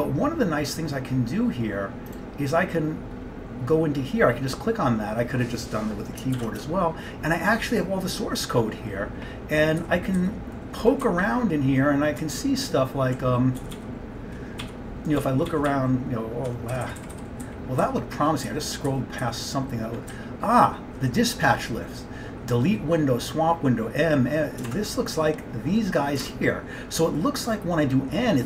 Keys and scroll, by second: 6.4 ctrl+x, 6.7 1, 9.9 Page_Down, 10.2 Page_Down, 11.1 Down, 11.3 Down, 11.8-13.1 Down, 13.4 Down, 13.7 Page_Up, 13.8 Page_Up, 14.7 Page_Up, 15.3-16.7 Page_Up, 16.8 Page_Down, 17.2 Page_Down, 18.1 Page_Down, 18.5 Page_Down, 20.2-21.0 Down, 21.2 Down, 24.9 alt+Tab, 26.3 alt+Tab.